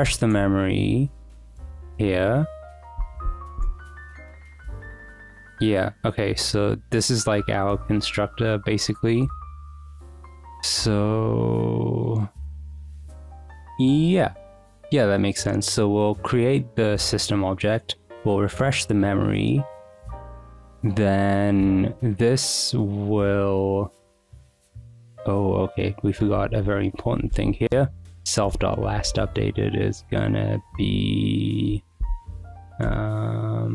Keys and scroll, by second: 0.0-4.3 typing, 0.5 Escape, 3.3 Escape, 8.8 Return, 26.8-28.9 typing, 28.5 Return, 30.2 Escape, 30.7-32.7 typing, 32.8 Return.